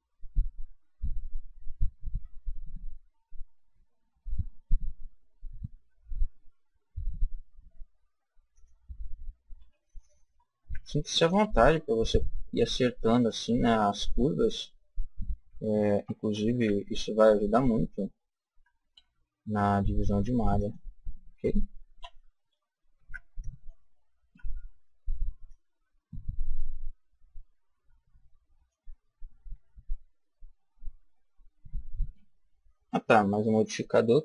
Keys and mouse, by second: 2.1 g, 8.5 click, 9.5 a, 10.5 b, 12.1 click, 15.9 a, 16.4 b, 18.7 g, 20.6 click, 21.9 a, 22.9 b, 25.4-27.0 drag, 30.6 a, 32.8-34.2 drag.